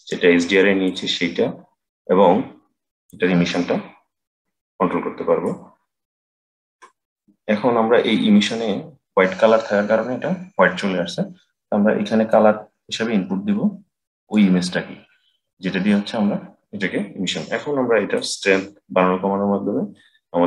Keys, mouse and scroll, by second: 2.9-6.0 drag, 12.2-15.2 drag, 18.0-20.4 drag.